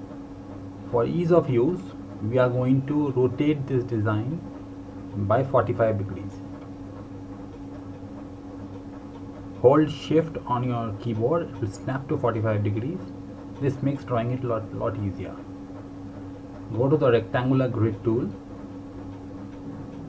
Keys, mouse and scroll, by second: 6.9 click, 17.3 click.